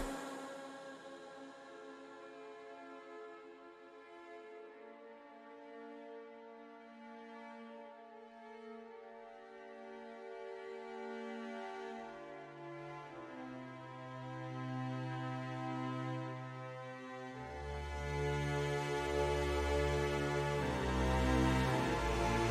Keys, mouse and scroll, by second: 1.5 click, 3.1 middle click, 4.0 middle click, 5.2 KP_1, 6.9-8.5 drag, 9.5-10.6 drag, 12.1 click, 15.3 click, 16.8-19.0 drag, 20.8 click.